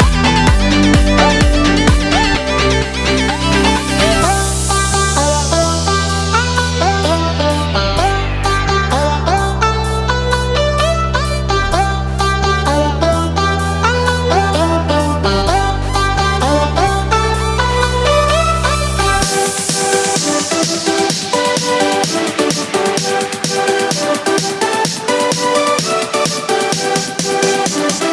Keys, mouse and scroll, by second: 1.9 click, 2.1-6.9 drag, 7.8-11.1 drag, 12.0 Tab, 13.9 click, 15.2 click, 15.8 click, 16.5 drag, 17.3 click, 19.0 click, 19.6 click, 21.0-23.0 drag, 22.8 l, 23.9 click, 24.1 Tab, 25.6 click, 26.0 click, 27.3 click.